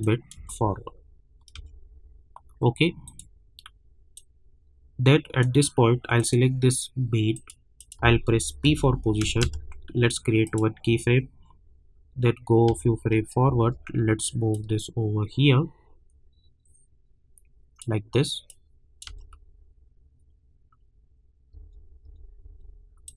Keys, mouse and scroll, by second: 0.3 space, 3.0-6.2 drag, 8.6 p, 9.2 space, 10.4 click, 12.7 space, 14.5-19.1 drag, 19.1 space, 21.5 space, 23.0-23.1 drag.